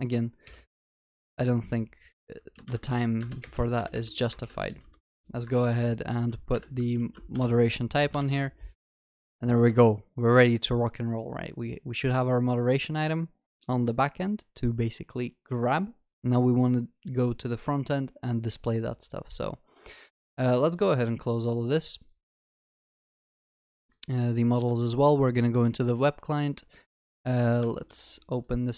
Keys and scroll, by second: 3.2 Return, 6.9 ctrl+s, 8.2 Escape, 12.2 ctrl+s.